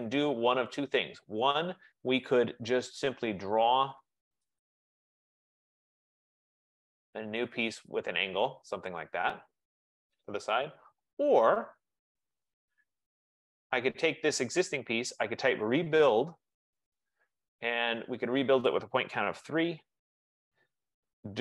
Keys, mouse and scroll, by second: 0.0-0.4 typing, 4.7 click, 6.3 click, 8.1 click, 9.1 click, 9.9 Return, 13.0 ctrl+z, 14.9-16.6 typing, 18.1-19.8 typing, 18.7 click.